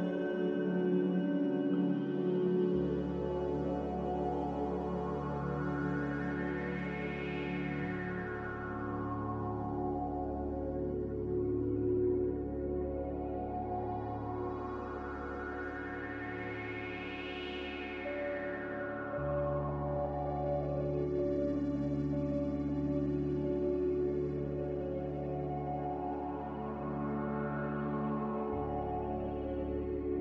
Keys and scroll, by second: 20.9 ctrl+z, 27.6 ctrl+z.